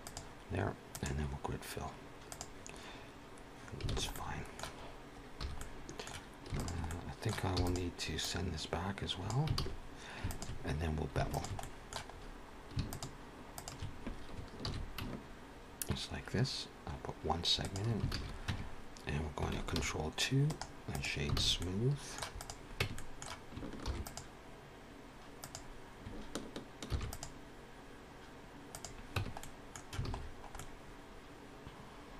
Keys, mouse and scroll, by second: 0.7 click, 3.9 alt+a, 4.0 middle click, 4.7-5.3 scroll up 2, 5.3 2, 5.5 middle click, 6.4 alt+shift+click, 6.8 middle click, 7.4 e, 8.1 click, 9.5 alt+a, 10.2 alt+shift+click, 11.4 alt+shift+click, 11.5 middle click, 12.0-12.4 scroll up 1, 12.8 alt+shift+click, 13.4 alt+shift+click, 14.5 ctrl+b, 18.0 alt+a, 18.8 Tab, 20.3 ctrl+2, 20.5 right click, 21.3 alt+a, 21.5 middle click, 22.3 click, 22.7 Tab, 22.9 middle click, 23.7 ctrl+r, 29.1 Tab, 29.3 middle click, 29.9 alt+a, 30.1-30.5 scroll down 4, 30.5 middle click.